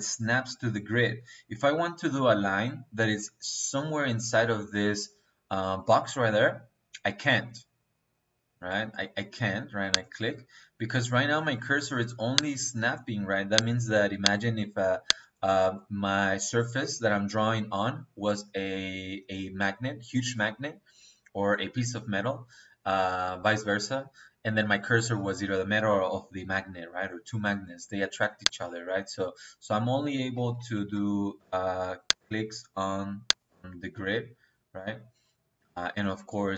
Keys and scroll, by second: 30.8 ctrl+z.